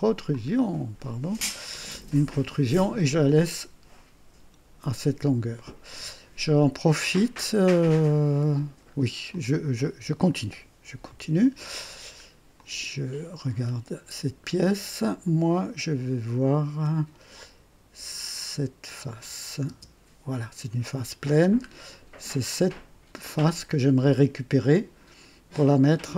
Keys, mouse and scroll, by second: 0.2 click, 3.4 click, 8.5 scroll down 2, 9.3-10.4 drag, 11.0 &, 11.8-12.4 right drag, 12.5 click, 13.6 scroll up 1, 19.0 click, 19.6 space, 21.2 scroll down 2, 22.4 click, 23.2 click, 24.5 click.